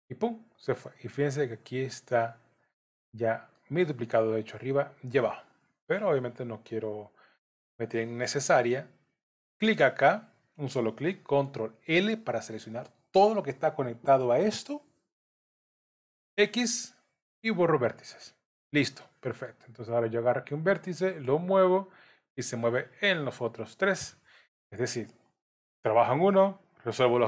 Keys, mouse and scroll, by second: 2.8 middle click, 7.9 Tab, 9.5 click, 11.9 ctrl+l, 18.6 middle click, 20.3 click, 21.3 g.